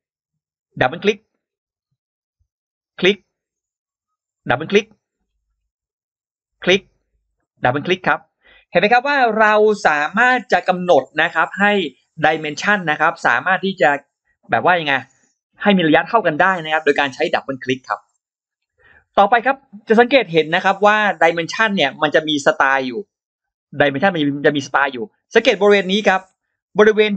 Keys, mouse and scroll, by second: 0.6 click, 0.8 click, 1.2-1.6 scroll down 2, 1.7 scroll up 2, 2.7 click, 4.2 click, 4.4 click, 5.1-5.4 scroll down 2, 5.4 scroll up 2, 6.3 click, 7.3 click, 7.5 click, 8.7-9.0 scroll down 2, 9.3-9.6 scroll up 2, 20.4-20.7 scroll up 2, 22.0-22.4 scroll down 2, 23.8-24.5 scroll down 2, 24.6 scroll up 2, 25.5-25.8 scroll down 2, 26.6-27.1 drag.